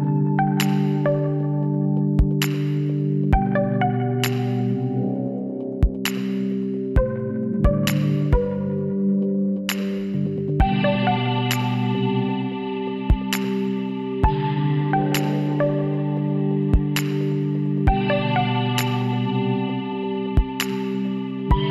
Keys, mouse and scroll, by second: 1.9 KP_3, 3.5 Tab, 5.8 s, 9.4-10.7 middle drag, 10.7 z, 11.2 middle click, 11.8 middle click, 12.8 s, 19.4-21.7 middle drag, 20.6 ctrl+z.